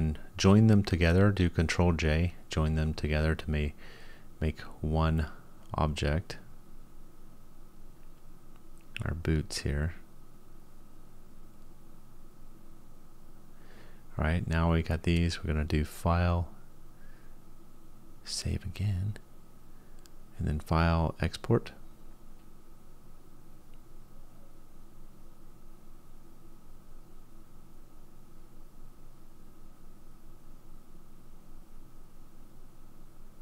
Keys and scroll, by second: 0.2 ctrl+j, 7.2 ctrl+j.